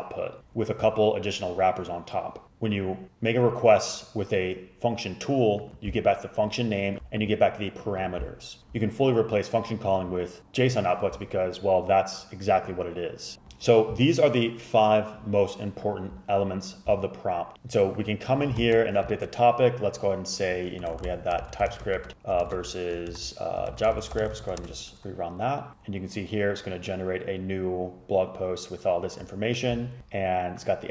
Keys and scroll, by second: 18.7 shift+super+Left, 20.7-24.9 typing.